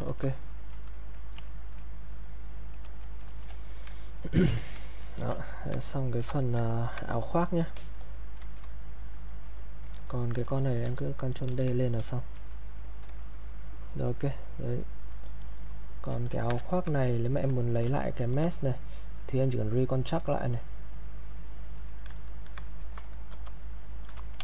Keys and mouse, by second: 1.5 ctrl+right click, 1.9-3.3 drag, 3.3 alt+click, 3.6 ctrl+right click, 4.1 ctrl+click, 5.0 alt+click, 5.4 ctrl+right click, 6.3 alt+click, 6.6 ctrl+right click, 8.0-9.9 drag, 10.8 ctrl+d, 11.9 click, 12.8-15.5 drag, 16.3 ctrl+right click, 16.7 ctrl+click, 17.1 click, 17.9 shift+f, 19.7 click, 23.3 shift+f.